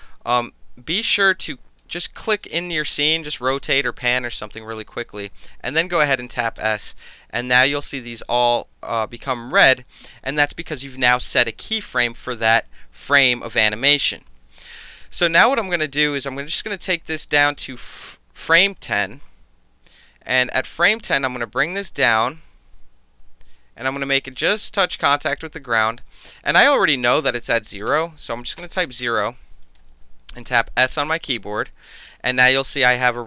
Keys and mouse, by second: 0.0-1.8 alt+drag, 2.4-3.3 alt+drag, 3.3 alt+middle click, 4.2 alt+middle click, 4.4 alt+click, 5.7 s, 16.8-18.5 drag, 20.0-20.4 alt+right drag, 21.1-24.3 drag, 24.7 alt+click, 25.0-25.4 alt+right drag, 26.4 click, 27.9 KP_0, 28.6 KP_Enter, 29.7 alt+middle click, 30.5 s.